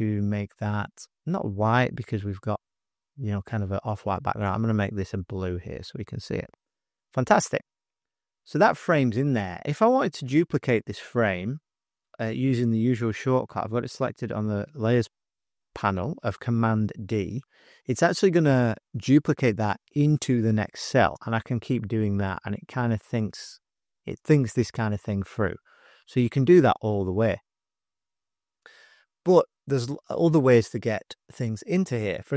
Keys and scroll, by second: 17.0 super+d, 21.5 super+d, 21.6 super+d, 21.8 super+d, 32.2 space.